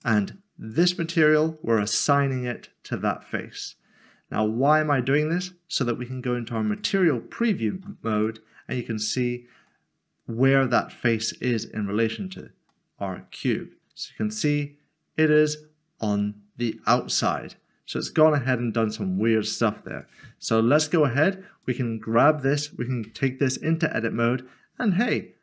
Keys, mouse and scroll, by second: 6.7 click, 8.9 Tab, 9.5 scroll down 1, 12.0 middle click, 19.9 click, 23.0 Tab.